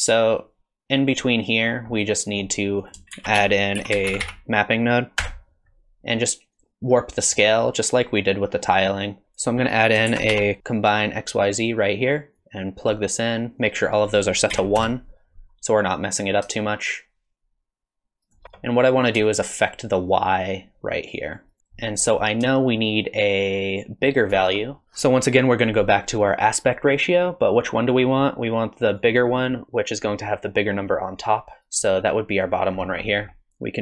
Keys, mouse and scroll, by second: 0.4 click, 1.7 scroll down 4, 2.0 middle click, 2.8 click, 3.1 shift+a, 4.2 p, 7.4 middle click, 8.6 middle click, 9.2 middle click, 9.2 click, 9.2 scroll down 8, 9.9 click, 10.1 shift+a, 12.4 click, 13.6 click, 16.6 shift+click, 19.3 shift+click, 21.6 middle click, 21.6 click, 21.6 scroll down 4, 22.0 click, 22.8 shift+click, 22.9 shift+click, 24.8 middle click, 24.8 middle click, 24.8 click, 24.8 scroll up 5, 28.4 click, 31.2 click, 32.5-33.1 scroll down 9, 33.1 middle click.